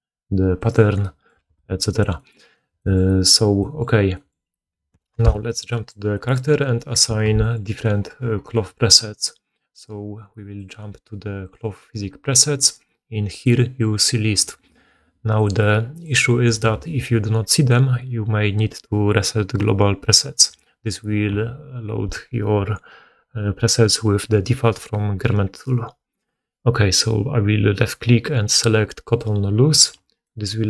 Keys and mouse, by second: 1.3 g, 2.3 right click, 5.0 1, 5.7-6.0 right drag, 5.8-30.1 middle drag, 7.2 alt+a, 10.5-30.6 drag.